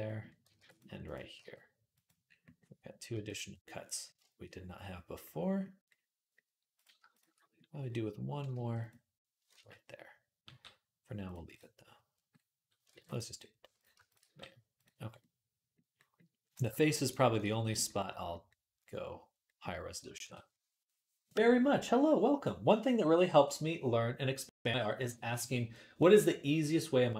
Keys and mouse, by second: 0.4 ctrl+r, 1.2 g, 2.9 g, 6.5 click, 6.6-16.3 shift+middle drag, 8.3 g, 9.3 ctrl+z, 10.3 g, 12.7 ctrl+r, 14.0 g, 16.3 click, 16.4-17.9 middle drag, 16.5 g, 20.5 ctrl+s.